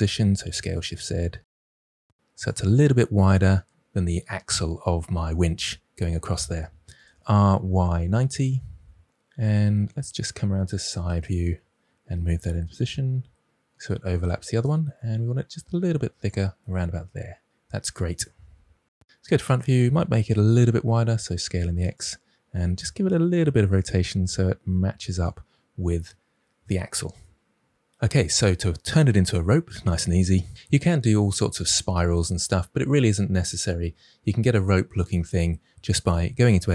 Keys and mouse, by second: 0.3 s, 0.5 shift+z, 2.3-3.3 drag, 6.9 r, 7.7 y, 8.0 9, 8.0 0, 8.3 Return, 12.3 KP_3, 13.4 g, 15.4 s, 16.4 click, 16.7-17.8 middle drag, 19.0 KP_1, 20.0 s, 20.5 x, 22.7 r, 23.9 g, 25.0-25.7 drag, 36.4 Tab.